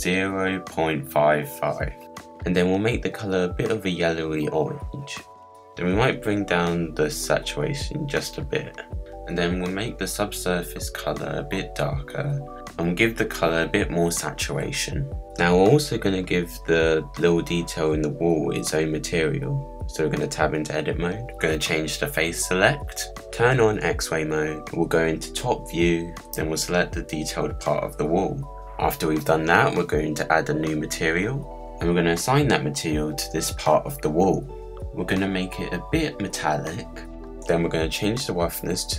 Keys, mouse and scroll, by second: 6.7-8.1 drag, 10.0 click, 15.8 click, 16.4 middle click, 17.1-17.4 scroll down 1, 17.4-18.0 scroll up 4, 18.0 click, 18.6-19.5 middle drag, 19.5 Tab, 19.8 click, 21.5 click, 21.9-23.3 middle drag, 23.3 click, 23.8-26.0 middle drag, 26.0 click, 26.5-26.8 scroll up 6, 27.0 scroll down 1, 27.4 click, 28.4-29.8 middle drag, 29.8-30.5 scroll down 5, 30.5-32.1 middle drag, 32.1-35.9 drag, 36.6-38.6 drag.